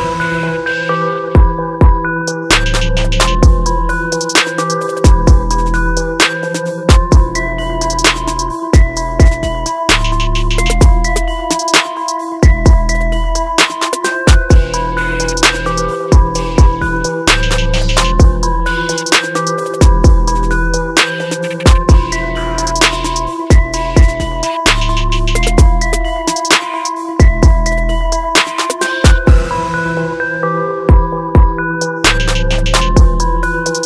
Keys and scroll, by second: 16.0 ctrl+=, 21.0 ctrl+d.